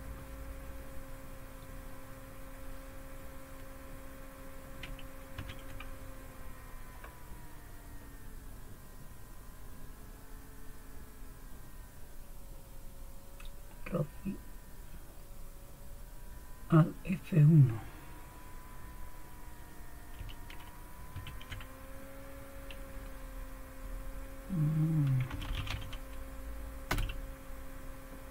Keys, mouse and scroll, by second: 5.4 super+1, 21.1 alt+F1, 25.2-26.2 typing, 26.9 Return.